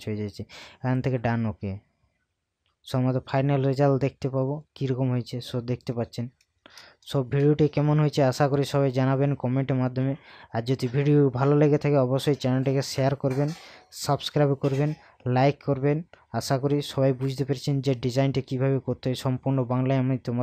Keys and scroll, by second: 6.7 ctrl+KP_Add.